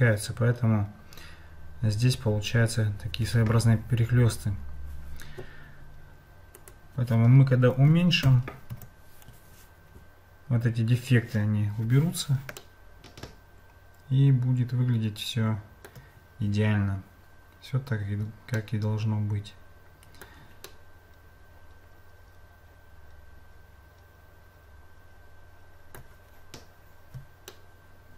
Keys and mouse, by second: 6.6-9.5 drag, 12.6-15.9 shift+middle drag, 18.6-20.3 shift+middle drag, 20.7-26.0 shift+middle drag, 27.5-28.1 shift+middle drag.